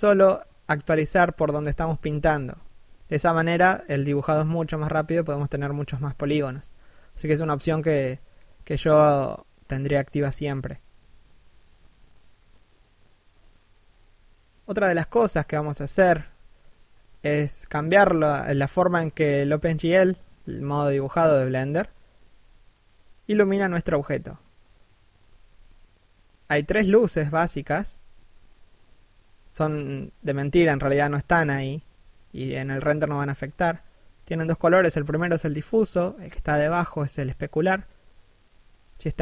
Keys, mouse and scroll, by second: 2.8 middle click, 3.7 3, 4.0 1, 4.5-5.1 scroll down 1, 10.7 middle click, 11.1 scroll up 1, 11.4 shift+middle click, 11.8 click, 15.3 middle click, 15.6 1, 15.9 shift+middle click, 16.3-17.3 scroll down 1, 32.1 middle click.